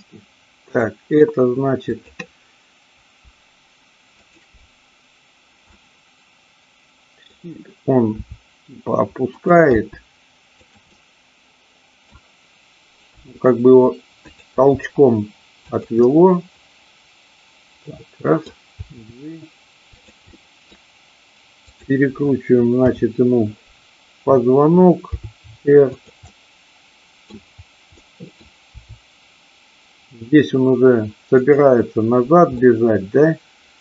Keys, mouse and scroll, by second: 0.7-1.2 middle drag, 4.2 shift+click, 5.7-7.3 middle drag, 8.2 r, 9.3 click, 9.7 g, 10.6 click, 10.8-11.9 middle drag, 11.9-12.5 scroll down 1, 13.1 r, 14.2 click, 14.6 g, 15.7 click, 16.0 scroll up 1, 16.1-18.5 middle drag, 18.8 g, 20.3-20.7 scroll up 1, 21.7 click, 22.8 KP_7, 25.1 r, 26.3-27.3 middle drag, 27.9 middle click, 28.7 r, 31.3 click, 32.6-33.8 middle drag.